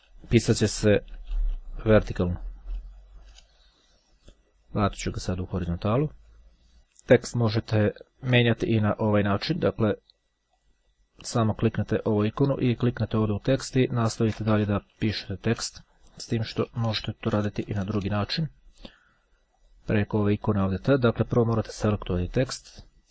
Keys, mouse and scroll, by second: 0.0-2.2 typing, 5.4 click, 6.3-6.7 scroll up 2, 7.9-8.4 ctrl+scroll up 2, 10.7 click, 13.0 click, 14.2 click, 14.5-15.8 typing, 19.7 click, 21.1 click, 22.3 click.